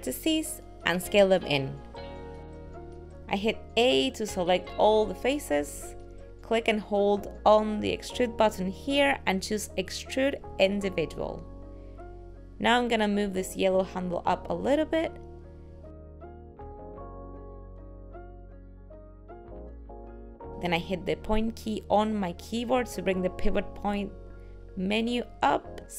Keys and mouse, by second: 0.7 click, 2.2 middle click, 3.0 s, 10.8 click, 14.6 click, 18.3 middle click, 20.7 ..